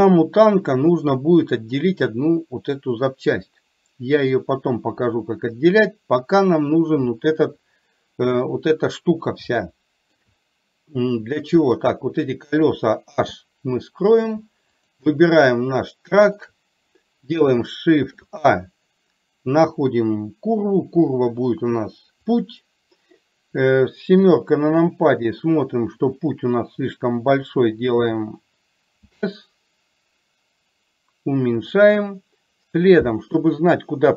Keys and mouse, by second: 0.0 click, 7.5 KP_3, 9.6 shift+middle click, 11.7 click, 14.9 click, 15.6-16.4 middle drag, 18.1 shift+a, 24.3 KP_7.